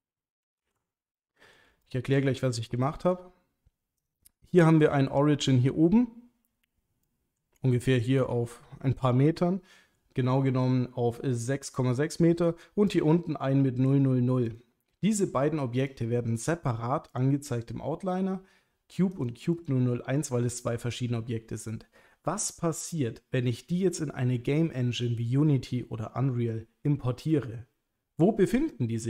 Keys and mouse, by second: 0.6 g, 1.2-1.5 middle drag, 1.8 shift+middle drag, 2.4-2.7 ctrl+middle drag, 3.1 click, 4.8 middle click, 7.1 middle drag, 8.2-10.0 middle drag, 12.9 click, 14.5 click, 15.1 click, 15.9 click, 16.4 click, 19.1 click.